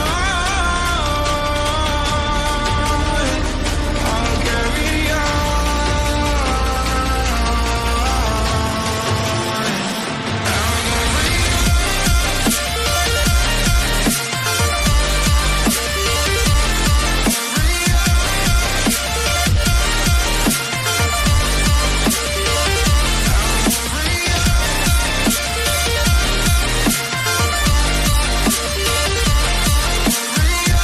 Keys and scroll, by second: 6.3-15.2 typing, 16.8 n, 21.0 ctrl+a, 21.0 ctrl+d.